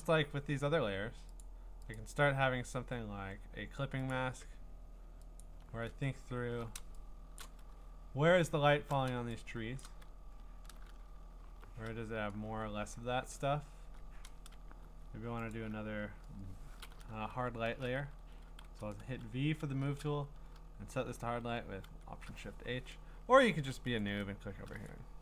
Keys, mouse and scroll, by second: 0.1 scroll, 1.4 click, 1.9 click, 2.6 scroll, 4.1 middle click, 4.1 click, 5.4 alt+click, 6.4 middle click, 6.5 middle click, 7.4 click, 7.7-8.7 ctrl+scroll, 9.8 click, 10.2-11.5 scroll, 11.5 scroll, 11.5 b, 15.5 alt+click, 17.3 alt+shift+h, 18.6 v, 21.8 alt+shift+h, 24.0 click, 24.9 click.